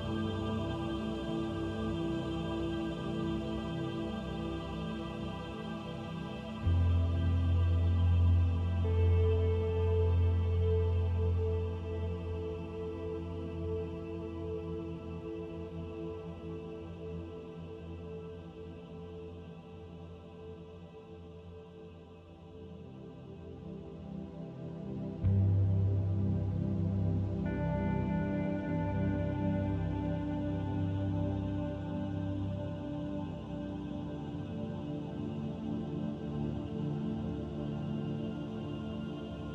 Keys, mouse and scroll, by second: 0.8 middle click, 5.4 right click, 6.7 middle click, 13.3 middle click, 16.2 click, 17.8 s, 22.2 ctrl+a, 25.8 click, 32.4 click, 34.4 click, 38.3 middle click.